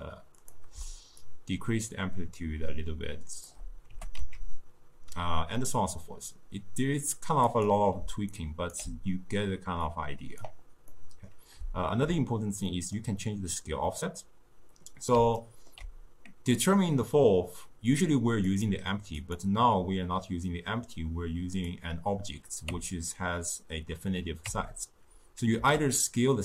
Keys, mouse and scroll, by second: 1.3-4.1 shift+drag, 4.1 g, 8.1 d, 8.4 right click, 8.8 d, 10.0 click, 11.0-18.5 middle drag, 18.6 click, 19.3 click, 21.7 click, 22.8 Tab, 24.6 Tab, 25.7 s.